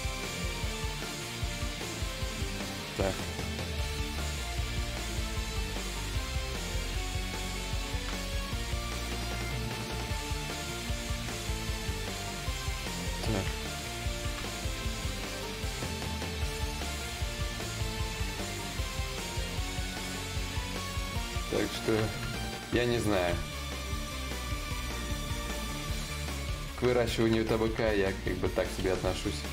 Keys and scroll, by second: 0.1 ctrl+z, 3.3 d, 6.0 ctrl+z, 9.1 d, 17.6 ctrl+z, 28.3 ctrl+z.